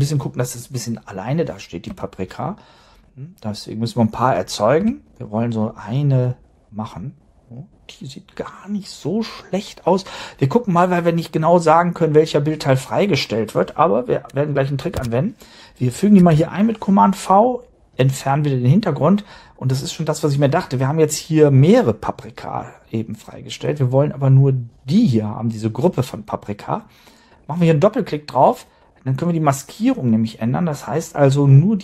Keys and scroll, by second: 1.8 space, 4.7 space, 14.9 super+Tab, 16.3 super+v.